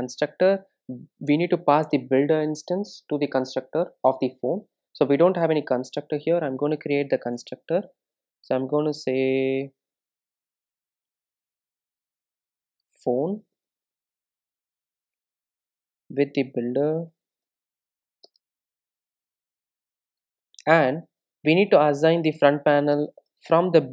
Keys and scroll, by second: 7.3 Return, 17.2 Return.